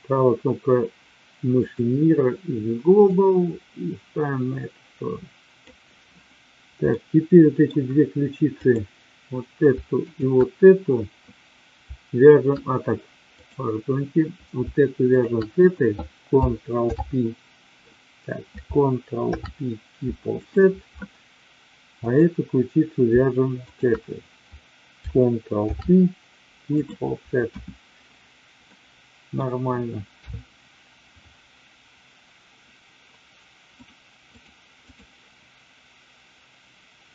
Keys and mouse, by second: 3.3-5.6 drag, 6.9 middle click, 8.5 click, 10.1 shift+click, 13.4 click, 15.1 shift+click, 16.9 alt+p, 19.3 ctrl+p, 23.6 shift+click, 25.6 ctrl+p, 27.4 KP_1, 28.7 middle click, 30.1 KP_3, 33.7 click, 34.3-35.0 drag.